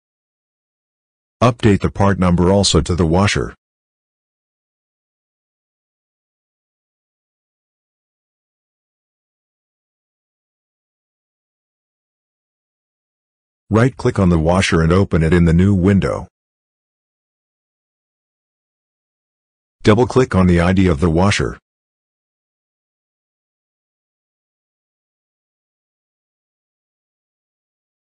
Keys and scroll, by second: 3.6 w, 4.4 a, 6.8-7.8 typing.